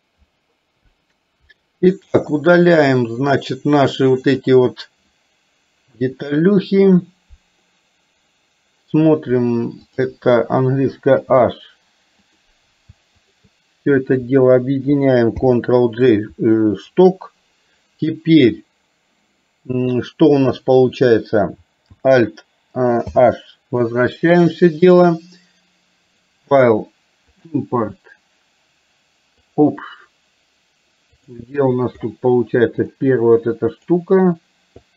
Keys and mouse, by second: 1.5 Delete, 4.4 click, 6.0 Delete, 11.2 h, 13.2 click, 15.4 ctrl+j, 23.1 alt+h, 26.2-29.9 drag.